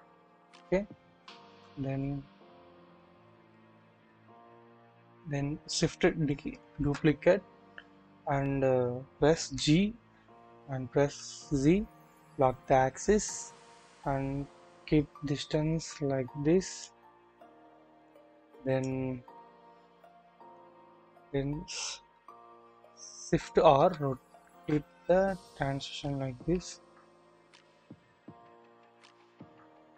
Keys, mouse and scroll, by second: 1.4 KP_1, 3.2 1, 3.4-4.2 shift+middle drag, 4.6-6.4 scroll up 1, 6.7 typing, 9.5 typing, 11.1 typing, 18.1 click, 19.7 shift+scroll down 1, 19.8 typing, 19.9-20.6 shift+middle drag, 23.1-24.6 typing, 24.9-25.2 scroll down 1, 26.0-26.8 typing, 28.3-28.9 typing, 28.5 scroll down 1, 29.1-29.7 shift+middle drag, 29.8-29.9 shift+scroll up 2.